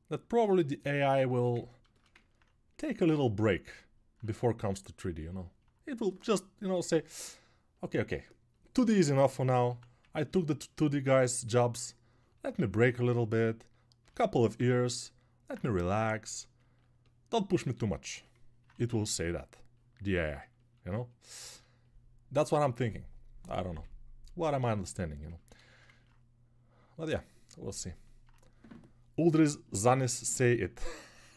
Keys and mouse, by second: 5.6-13.0 drag, 5.6-13.0 middle drag, 5.6-13.0 right drag, 19.1 ctrl+1.